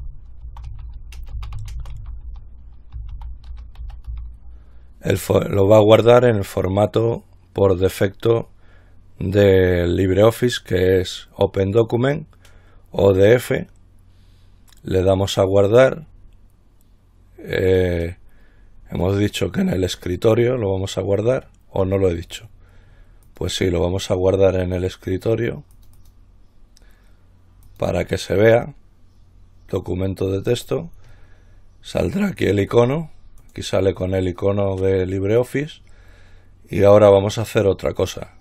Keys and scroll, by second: 0.0-4.8 typing.